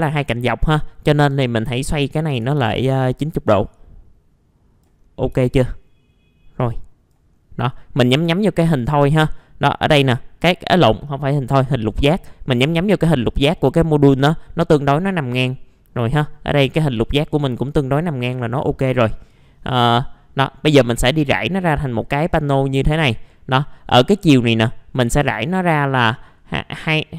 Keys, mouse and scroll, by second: 0.6 scroll down 1, 1.0 middle click, 1.6 click, 2.5 ctrl+z, 3.0-5.0 drag, 5.0 scroll down 1, 6.6 click, 7.3 scroll up 1, 7.7 middle click, 15.1 scroll down 1, 18.3 middle click, 18.4-18.8 scroll down 1, 18.8 middle click, 19.3 click, 19.9 middle click, 20.5 scroll down 1, 20.8 middle click, 21.2-21.8 scroll up 1, 23.9-27.1 drag.